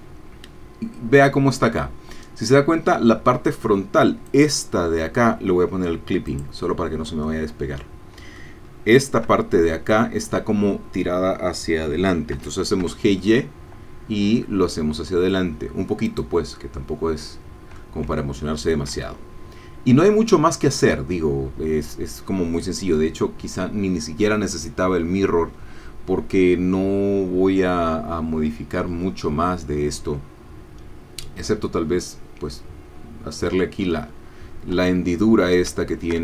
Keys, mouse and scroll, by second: 4.2-5.2 drag, 6.3 click, 7.2-11.8 middle drag, 12.4 g, 12.8 y, 16.1 click, 16.6-20.4 middle drag, 34.8 Tab, 35.8 shift+middle click.